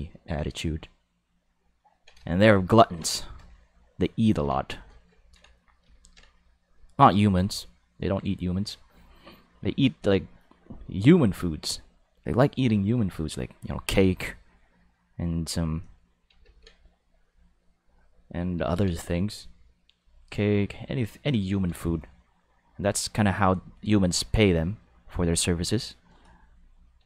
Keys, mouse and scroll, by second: 0.4-2.1 ctrl+middle drag, 2.3 shift+middle click, 2.8 ctrl+middle click, 3.1 shift+middle click, 3.5 ctrl+middle click, 4.7 shift+middle click, 5.2 ctrl+middle click, 5.9 ctrl+middle click, 7.5 ctrl+middle click, 14.7 click, 16.4 ctrl+z, 16.9 click, 19.9 click, 20.6 click, 23.4 click, 25.3 click.